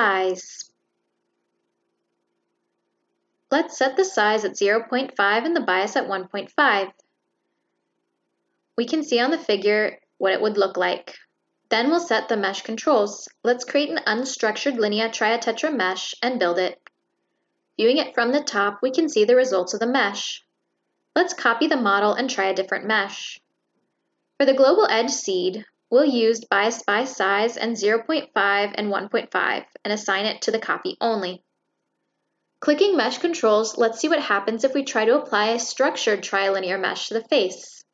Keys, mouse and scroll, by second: 3.1 click, 4.5 click, 5.9 click, 6.3 click, 6.8 click, 7.1 ctrl+middle click, 10.1 click, 10.9 click, 11.2 click, 12.0 click, 12.4 click, 12.8 click, 13.2 click, 13.4 click, 13.7 click, 14.3 click, 14.6 drag, 14.8 click, 17.1 click, 18.4 click, 19.4 click, 19.8 click, 20.3 click, 20.8 click, 21.4 click, 22.3 click, 23.5 click, 24.5 click, 25.4 click, 25.8 click, 26.4 click, 27.0 click, 28.0 click, 29.2 click, 29.8 click, 30.5 click, 31.9 click, 32.3 click, 33.3 click, 33.5 click, 34.2 click, 35.4 click, 35.9 click, 36.5 click.